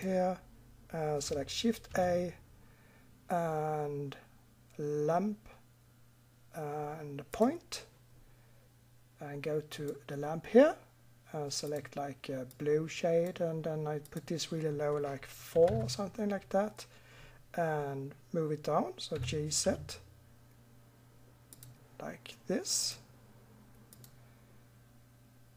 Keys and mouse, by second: 1.9 shift+a, 9.7-11.5 middle drag, 11.6-13.5 middle drag, 14.0-18.0 drag, 19.1 g, 22.8-23.7 drag.